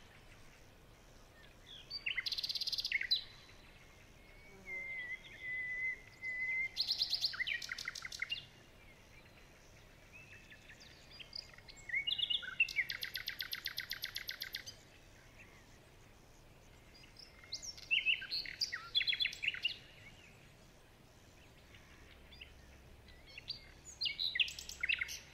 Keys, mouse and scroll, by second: 0.4 alt+click, 1.6-1.9 alt+scroll down 2, 1.9 alt+scroll up 2, 2.9 alt+click, 4.1 alt+scroll up 1, 5.5 alt+scroll down 2, 5.7 alt+scroll up 1, 6.3 alt+scroll down 1, 6.5-7.1 alt+scroll up 2, 9.1 alt+scroll down 1, 9.3 alt+scroll up 1, 12.2 shift+click, 13.5 alt+scroll down 1, 13.7 alt+scroll up 2, 14.1 alt+scroll down 1, 15.4 alt+scroll down 1, 15.7-16.0 alt+scroll up 3, 16.0 alt+scroll down 2, 16.3 alt+scroll up 1, 16.9 alt+scroll down 1, 17.0 alt+scroll up 2, 19.3 ctrl+z, 19.7-20.1 alt+scroll down 1, 20.1 alt+scroll up 1, 20.3 alt+scroll down 1, 20.7 alt+scroll up 1, 20.9 alt+scroll down 1, 22.2-24.3 alt+scroll up 2.